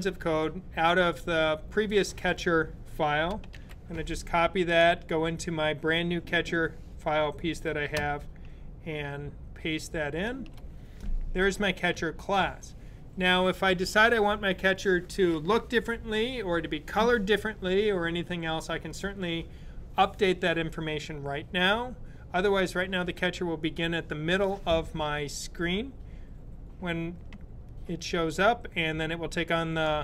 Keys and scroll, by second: 3.3 super+c, 10.0 super+v.